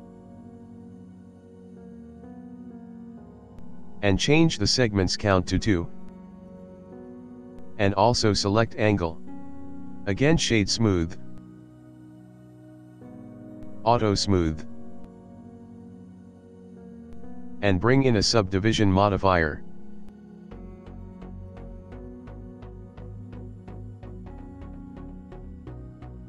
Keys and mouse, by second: 0.6 click, 5.4 click, 8.4 click, 10.2 click, 10.3 click, 10.9 right click, 13.1 click, 14.1 click, 14.8 middle click, 15.6 middle click, 16.2 click, 17.3 click, 17.9 click, 20.4 click, 20.9 click, 22.8 middle click, 23.4 ctrl+middle click, 23.9 middle click, 24.4 ctrl+middle click, 25.0 shift+middle click, 25.9 ctrl+middle click.